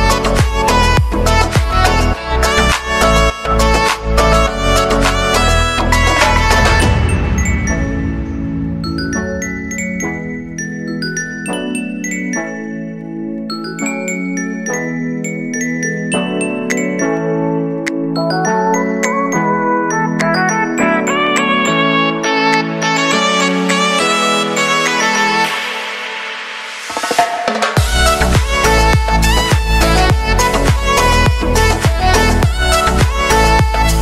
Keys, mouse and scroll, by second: 3.6 click, 5.7 ctrl+d, 9.3 shift+click, 10.1 ctrl+shift+c, 10.4-12.9 typing, 13.3 Return, 15.8 click, 17.1 ctrl+shift+c, 18.0-19.6 typing, 19.6 Return, 21.3 click, 23.8 space, 26.9 click, 28.4 space, 30.0 click, 32.5 space.